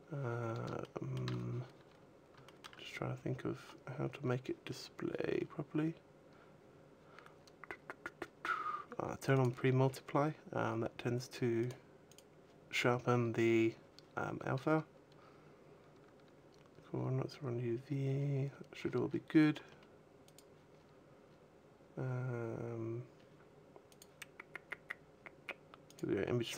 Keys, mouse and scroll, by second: 0.6 shift+middle click, 1.6-2.0 scroll down 1, 2.1 shift+middle click, 3.6-4.2 scroll down 1, 4.2-4.9 scroll down 2, 5.2-5.7 scroll down 4, 7.1-8.5 scroll down 9, 8.0-9.0 scroll up 6, 9.0 click, 9.4-10.4 scroll up 2, 10.4-11.1 scroll up 2, 11.4 click, 13.4 click, 14.3-15.0 scroll down 4, 15.0-15.6 scroll down 1, 15.6-16.7 scroll down 4, 17.6-18.6 scroll down 12, 18.6-19.6 scroll up 16, 19.6-19.9 scroll up 3, 19.9 click, 20.9-22.7 scroll down 10, 22.7-23.5 scroll down 3, 23.5 click, 24.3-24.9 scroll down 1, 24.9-25.6 scroll down 4, 25.6 scroll down 2, 25.7 click.